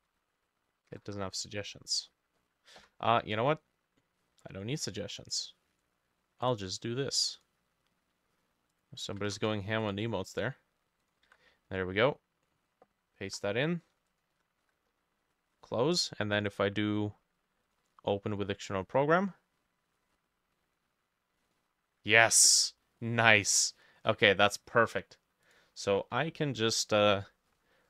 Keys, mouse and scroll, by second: 0.0-1.1 typing, 1.6-2.8 scroll up 12, 2.8 Escape, 5.2 right click, 6.5 right click, 9.1 ctrl+a, 9.4 ctrl+c, 9.4 typing, 11.3 ctrl+v, 14.4 BackSpace, 16.5 right click, 23.0 middle click, 23.6 scroll down 2, 23.6 middle click, 24.2 middle click.